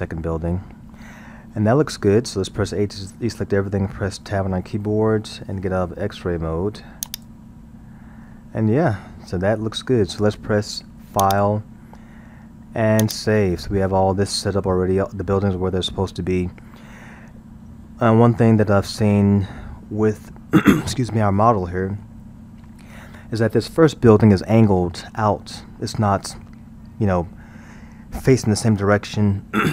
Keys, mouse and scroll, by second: 3.1 a, 4.2 Tab, 7.1-8.2 drag, 8.2-11.2 middle drag, 11.2-19.3 drag, 21.6-22.3 middle drag, 22.3-22.8 scroll, 22.8-25.8 middle drag.